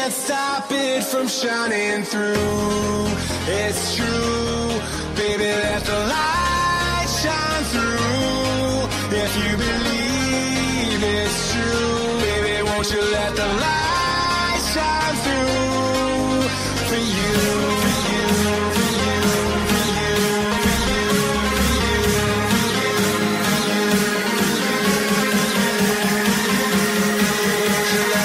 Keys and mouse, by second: 0.4 click, 1.4-4.8 typing, 4.8 click, 6.4 click, 11.2 ctrl+z, 11.9 click, 13.8 Return, 13.8 click, 13.8 KP_0, 13.8 KP_2, 16.3 alt+click, 17.9-20.5 typing, 18.2 alt+click, 19.5 KP_Multiply, 20.7 Return, 21.6 click, 22.2 space, 25.8 click, 27.0 click, 27.4 BackSpace, 27.8 BackSpace, 28.1 KP_0.